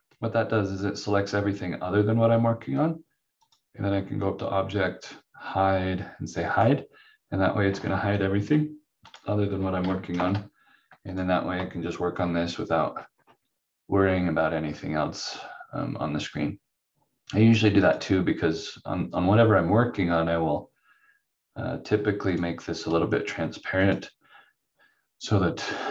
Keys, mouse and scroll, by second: 3.4 click, 6.5 click, 10.1 shift+F2, 11.1 click, 11.7-12.1 scroll down 1, 17.8 click, 22.2 click.